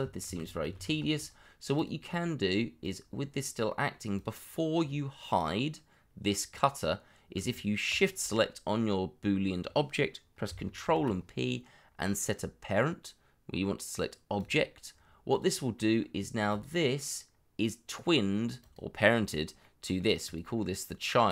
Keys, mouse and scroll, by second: 0.2 ctrl+z, 3.6 middle click, 7.8 shift+click, 8.8-10.4 scroll up 1, 10.8 ctrl+p, 15.7 middle click, 19.6 middle click.